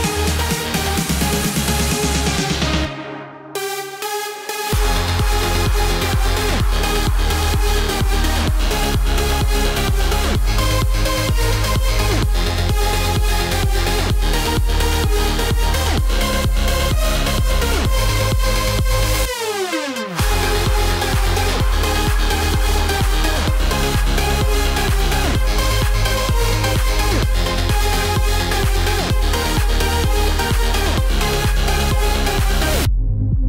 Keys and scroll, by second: 31.5 ctrl+z.